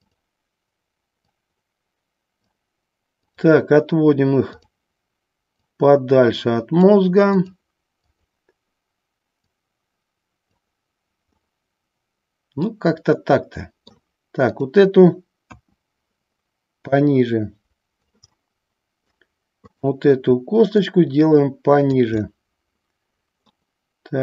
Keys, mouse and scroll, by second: 0.2 click, 1.5-2.6 drag, 3.5 click, 5.8-7.0 drag, 7.5 click, 8.2 click, 9.6 click, 11.4-14.1 middle drag, 15.6 KP_1, 17.1 click, 18.6 middle click, 20.0 click, 21.0-22.1 drag, 22.4-23.7 middle drag.